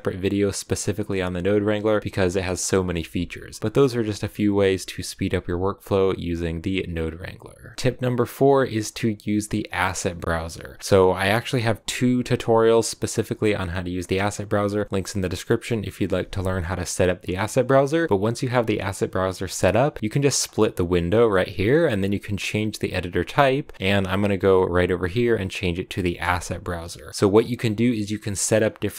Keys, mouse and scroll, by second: 7.7-20.9 middle drag, 20.9-28.9 drag.